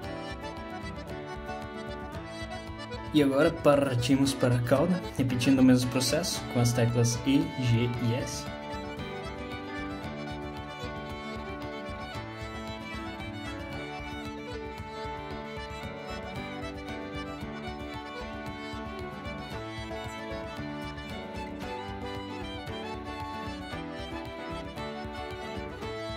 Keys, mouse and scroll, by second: 1.8-2.3 scroll down 1, 2.5 shift+middle click, 3.3 click, 6.9 shift+click, 10.5 e, 12.8 s, 14.4 g, 15.4 shift+middle click, 16.4 e, 18.6 s, 19.6 g, 20.8 e, 22.0 s, 23.5 g, 24.8 click, 25.7 g, 26.0 click.